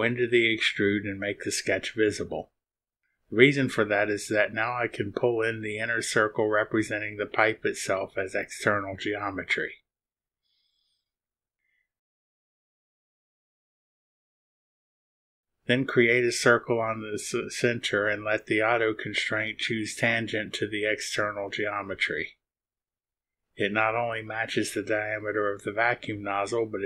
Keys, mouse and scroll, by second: 0.3 space, 1.2 click, 1.6 click, 2.1 space, 4.7 click, 8.7 click, 11.5 click, 16.1 click, 18.2 click, 23.8 click.